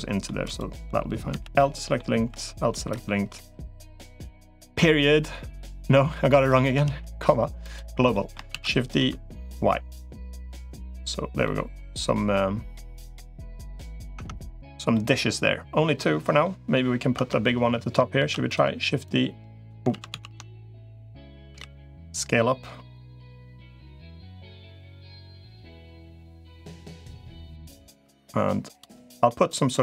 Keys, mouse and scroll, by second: 0.3 click, 1.1 l, 1.4 middle click, 2.1 l, 2.5 middle click, 2.9 click, 7.9-10.5 shift+middle drag, 8.3 shift+d, 11.2-13.7 middle drag, 14.1 Tab, 14.7-16.3 middle drag, 17.1 Tab, 18.1 shift+d, 18.9 click, 19.7 ctrl+z, 19.9 ctrl+z, 20.7 click, 21.3 s, 25.4 middle click, 26.3 r, 27.9 g, 28.7 middle click, 29.7 middle click.